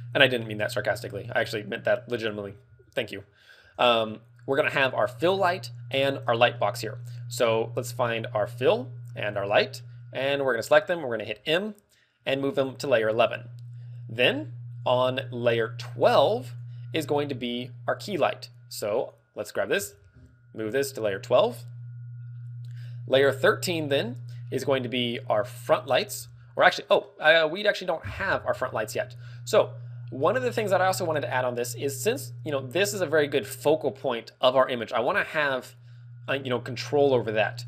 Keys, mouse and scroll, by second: 6.1 click, 6.5 middle click, 7.4 middle click, 7.4 right click, 7.9 right click, 8.4 middle click, 9.3 shift+right click, 9.4 shift+right click, 10.2 shift+right click, 11.2 m, 12.5 m, 17.9 click, 18.9 click, 18.9 right click, 19.7 m, 20.9 m, 25.8 click, 26.1-26.4 scroll up 5, 26.5 middle click, 27.1 scroll down 5, 28.7 click, 29.2 middle click, 30.2 alt+middle click, 31.1 alt+middle click, 35.0 ctrl+w, 36.8 scroll up 4.